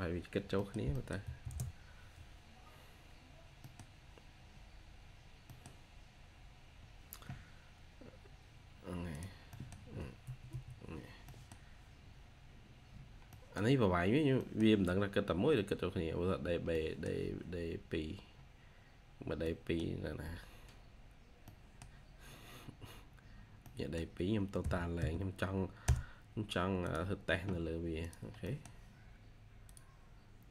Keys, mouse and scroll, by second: 0.5 middle click, 1.1 2, 3.5 middle click, 5.3 middle click, 5.5-6.5 scroll down 1, 9.4 middle click, 10.1 Escape, 10.4 Escape, 10.4 scroll up 1, 11.2 middle click, 11.4-11.8 scroll down 1, 12.3-12.8 scroll up 1, 13.2 middle click, 14.3 middle click, 16.3-16.6 scroll down 1, 16.6 middle click, 17.1-17.5 scroll down 1, 17.5 scroll up 1, 19.3 middle click, 21.0-21.4 scroll down 1, 21.4 middle click, 21.8 scroll down 1, 22.0-22.9 scroll up 1, 23.5 middle click, 24.5 typing, 28.3 typing, 28.3 middle click.